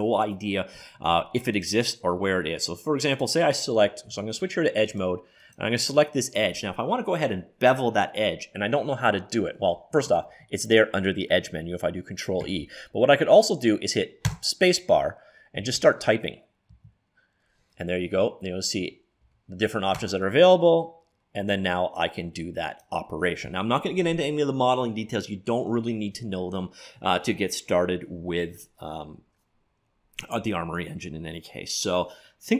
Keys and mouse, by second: 1.6-3.3 drag, 3.5 click, 4.2 ctrl+Tab, 5.5-6.5 right drag, 6.8 click, 10.4 ctrl+e, 14.4 space.